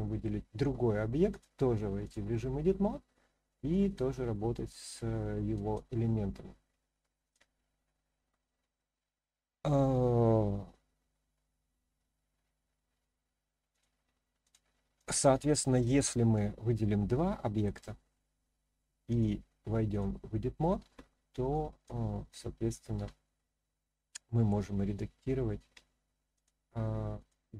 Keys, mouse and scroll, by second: 1.3-2.1 drag, 3.7 drag, 4.7 drag, 5.5 drag, 7.2-13.8 drag, 14.4 click, 14.9 click, 15.6 click, 16.3-17.6 drag, 19.1-20.0 drag, 21.5-21.8 drag, 22.9 g, 25.7 z, 26.3 click, 27.2 click.